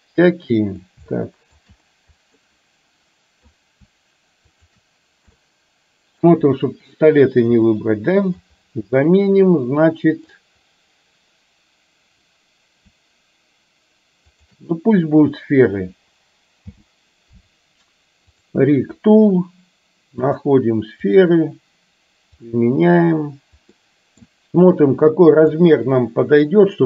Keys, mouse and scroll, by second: 1.2-1.6 shift+middle drag, 2.5-3.6 middle drag, 5.5-6.2 middle drag, 7.7-8.5 middle drag, 9.0-10.4 middle drag, 16.7 n, 20.4-21.2 drag, 22.5-22.9 drag, 23.7 scroll up 1, 23.9 middle click, 24.2 scroll down 1, 25.6-26.8 drag.